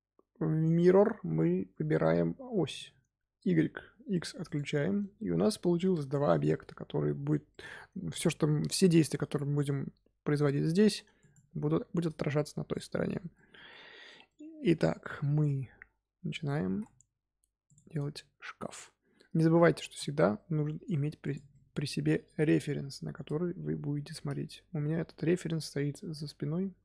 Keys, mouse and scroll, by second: 2.6 click, 4.4 click, 4.9-8.1 middle drag, 8.1 click, 8.6-9.0 shift+middle drag, 9.0 Tab, 10.2 g, 13.3-16.6 middle drag, 16.6 s, 18.1-19.8 middle drag, 19.8 g, 21.4 middle click, 22.0 scroll down 2, 22.2 KP_7, 23.6-24.6 scroll up 2, 24.6 g.